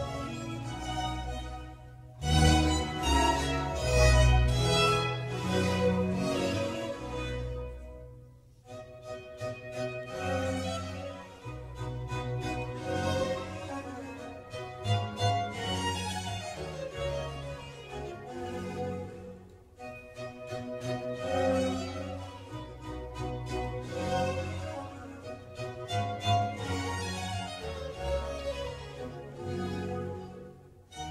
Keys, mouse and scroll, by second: 0.2-2.1 shift+middle drag, 2.1 click, 2.7 ctrl+r, 7.6 click, 9.2 ctrl+r, 10.9 ctrl+r, 14.2 click, 15.7 ctrl+r, 18.8 click, 19.1-22.2 middle drag, 24.2 ctrl+r, 28.3 ctrl+z, 28.6 middle click, 29.2 3, 29.9 click.